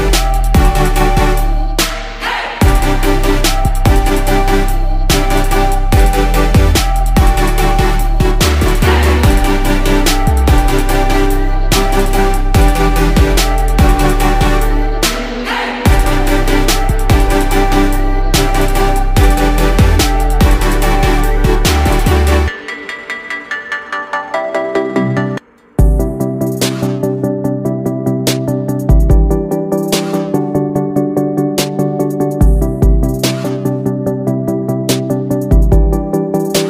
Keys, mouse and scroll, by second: 15.2 ctrl+u, 18.6 ctrl+z, 18.8 right click, 23.7 ctrl+z, 30.0 ctrl+z, 33.6 ctrl+z, 34.4 ctrl+z, 35.5 ctrl+z.